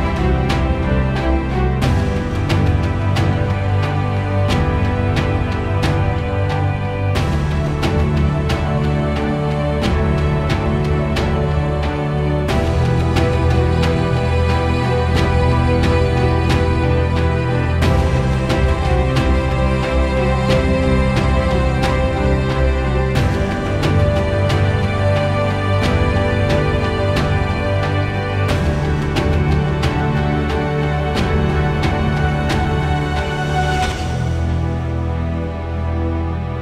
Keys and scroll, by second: 0.1 Return, 4.3 1, 4.6 7, 5.0 Return, 13.3 p, 30.7 4, 31.2 Return.